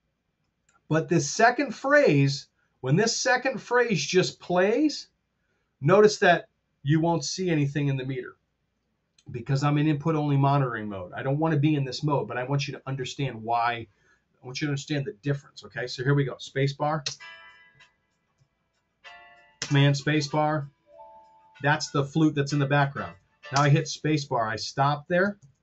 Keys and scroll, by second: 16.9 space, 19.5 super+space, 23.6 space, 25.4 super+z.